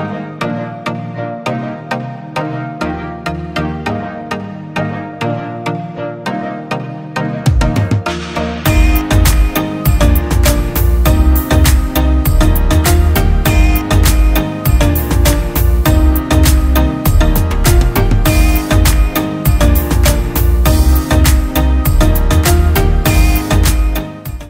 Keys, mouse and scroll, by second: 2.6-3.3 alt+scroll up 1.